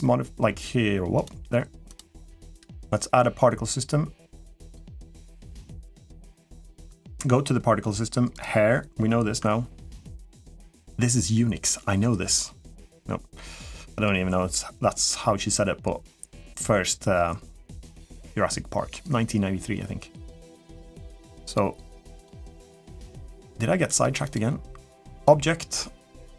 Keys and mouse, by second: 1.0 click, 1.6-4.5 drag, 6.7 click, 8.1 click, 21.3 click, 22.0 click, 23.7 click, 24.0-25.0 drag.